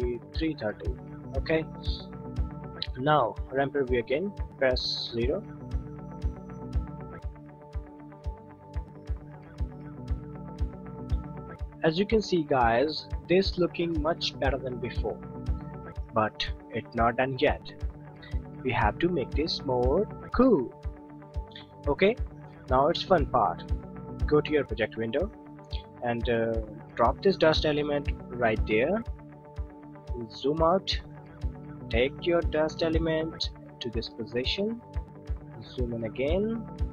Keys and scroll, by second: 5.0 o.